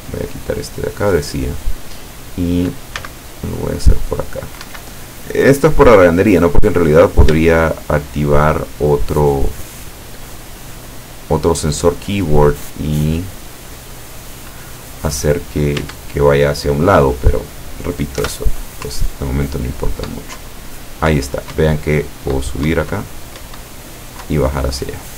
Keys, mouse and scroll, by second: 3.0 c, 3.4-4.7 drag, 4.7 Escape, 5.1-6.4 drag, 7.0 right click, 7.5 shift+right click, 8.0 shift+right click, 8.4 shift+right click, 8.9 shift+right click, 9.5 shift+right click, 10.0 shift+right click, 10.5 shift+right click, 11.3 shift+right click, 11.7 shift+right click, 12.4-14.5 shift+drag, 15.8 Tab, 18.3 p, 19.0 Up, 20.5 Down, 21.6 Up, 24.3 Down.